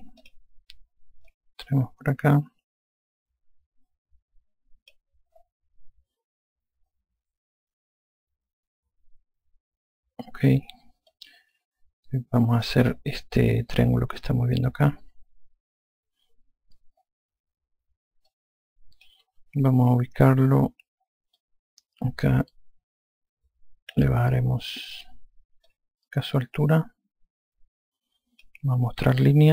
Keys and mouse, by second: 1.1 click, 11.9 click, 19.1 click, 20.4 F1, 22.2 alt+click, 26.5 click.